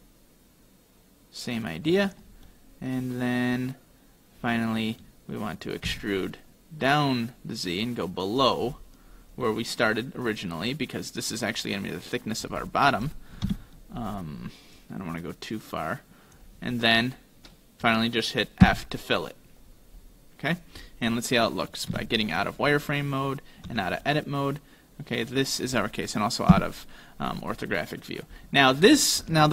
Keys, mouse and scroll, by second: 2.5 middle click, 8.4 e, 8.8-9.4 scroll up 4, 9.4 middle click, 12.7 scroll up 2, 13.5 KP_1, 14.8 click, 16.8 middle click, 18.7 f, 19.6-21.8 scroll down 7, 21.8 middle click, 21.9 z, 22.4 middle click, 23.7 Tab, 24.1 middle click, 26.6 KP_5, 27.3-27.7 scroll up 1, 27.7 scroll down 1, 27.8-28.4 scroll down 1, 28.4-28.9 scroll up 2, 28.9-29.5 scroll down 2.